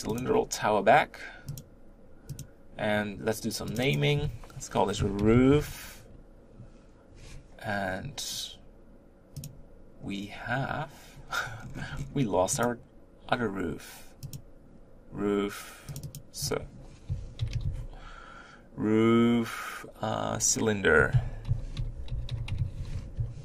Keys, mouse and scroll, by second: 0.1 click, 1.3 click, 2.2 click, 3.7-9.4 drag, 12.5 click, 14.1 click, 15.9-23.1 drag.